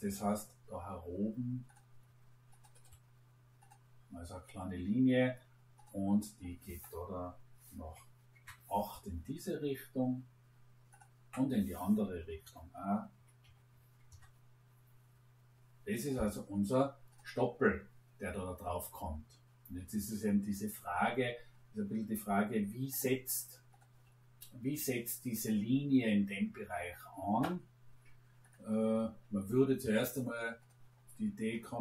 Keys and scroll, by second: 7.8 8, 8.3 Return, 12.4 -, 13.4 6, 14.0 Return.